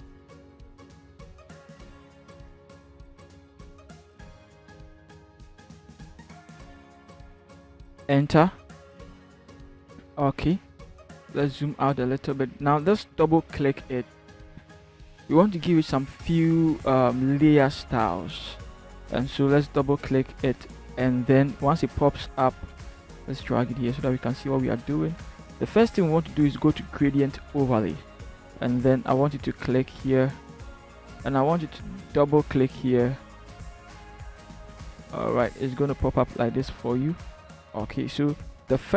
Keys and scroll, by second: 7.3 alt+shift+Return, 9.0 shift+Down, 9.4 v, 9.4 shift+Down, 11.3 ctrl+-.